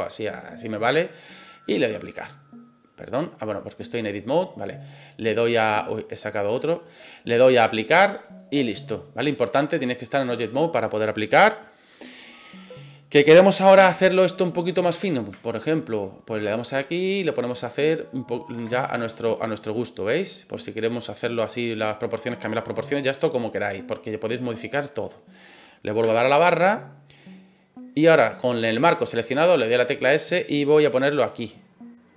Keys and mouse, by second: 1.6-2.9 drag, 3.1 click, 4.0 click, 6.3 click, 7.2-8.3 drag, 8.8 middle click, 10.2 middle click, 12.7-13.2 middle drag, 13.8 Tab, 14.4 right click, 14.9 middle click, 15.8 shift+right click, 17.1 right click, 18.0 right click, 18.8 ctrl+z, 19.4-21.2 drag, 21.4 middle click, 24.1 click, 28.7 s, 32.0 click.